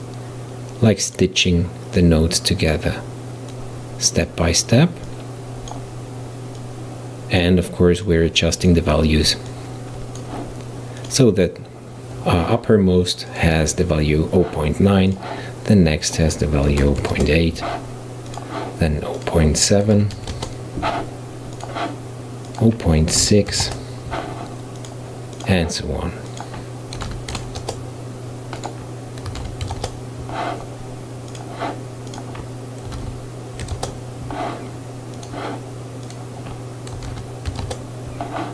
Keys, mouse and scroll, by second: 0.0 click, 2.0 click, 3.5 click, 5.1-6.8 drag, 8.1 click, 9.5-11.1 drag, 13.3 click, 15.2 click, 16.1-18.4 drag, 19.2-21.7 drag, 22.5-24.9 drag, 25.4 click, 26.3-31.4 drag, 32.1-35.3 drag, 36.1-38.5 drag.